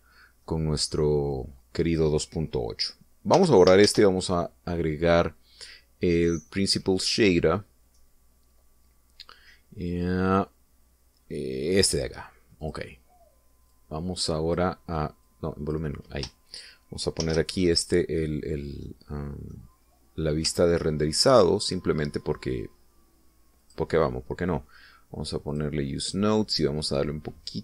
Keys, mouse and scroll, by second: 0.4 click, 1.4-2.0 middle drag, 2.3-3.1 drag, 4.3 x, 4.8 shift+a, 12.6 click, 13.6 click, 14.6-15.7 drag, 16.2 click, 18.2 shift+z, 19.8-20.6 middle drag, 20.8-21.3 scroll up 2, 21.5-22.3 shift+middle drag, 24.6 click, 26.5 click, 27.0 click.